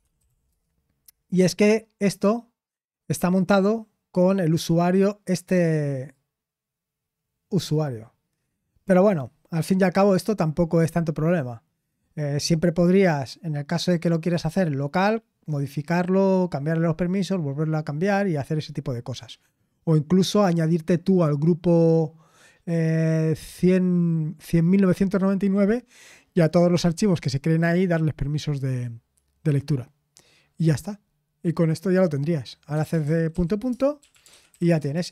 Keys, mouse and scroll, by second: 0.0-0.8 typing, 8.5 click, 33.7-35.1 typing.